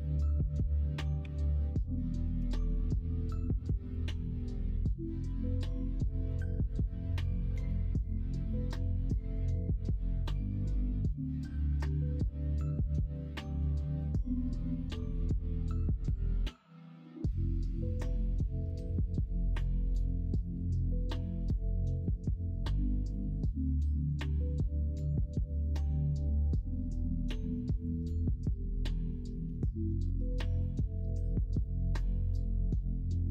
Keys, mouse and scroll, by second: 1.2 2, 2.3 g, 4.2 middle click, 5.9 l, 6.5 m, 10.2 middle click, 10.6 middle click, 11.0 middle click, 11.1 middle click, 11.3 middle click, 11.7-12.8 middle drag, 13.2 ctrl+r, 19.9 ctrl+r, 21.0 2, 24.3 ctrl+b, 28.3 middle click, 29.4 l, 30.1 m, 31.7 middle click, 32.4 middle click.